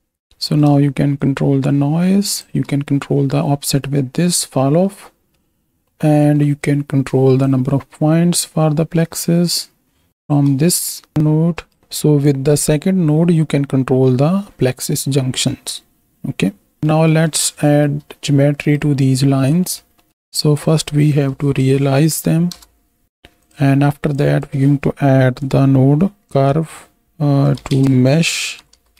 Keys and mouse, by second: 0.5 click, 1.1-2.4 shift+drag, 4.9 click, 4.9 right click, 5.9 click, 5.9 right click, 7.7-10.3 shift+drag, 11.2 right click, 11.8-15.8 shift+drag, 16.9 middle click, 17.7 shift+middle click, 18.6 click, 19.5 middle click, 20.0 middle drag, 20.2-22.5 drag, 23.3 click, 24.1-28.9 drag.